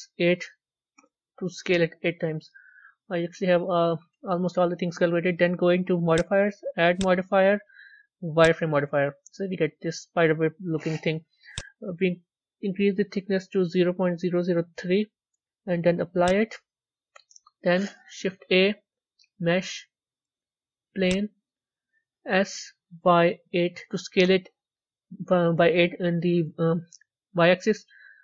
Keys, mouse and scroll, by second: 1.6-2.0 scroll down 8, 2.0 scroll up 1, 2.1-3.2 scroll down 5, 8.3 click, 9.1-14.5 middle drag, 14.5 click, 16.1-17.3 drag, 17.3-21.0 middle drag, 21.0 shift+a, 22.4 s.